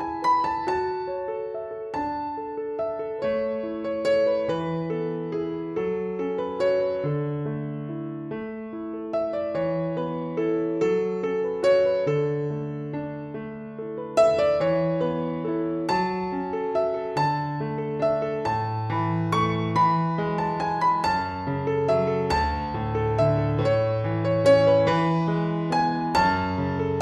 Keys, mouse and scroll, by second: 5.4 click, 10.7 click, 16.1 click, 21.9 click.